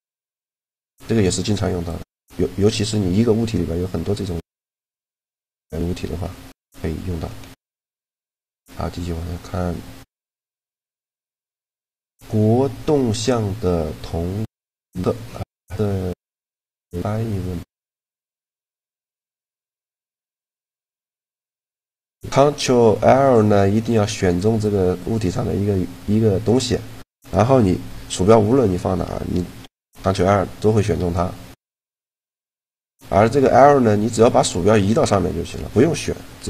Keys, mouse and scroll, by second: 3.3 Tab, 3.7 Tab, 4.5 a, 5.2 a, 6.0 Tab, 6.9 Tab, 8.1 click, 8.7 click, 8.9 click, 9.0 click, 23.3-24.5 right drag, 23.8-25.5 drag, 25.5-26.9 right drag, 29.5 ctrl+l, 32.8 a, 36.2 l.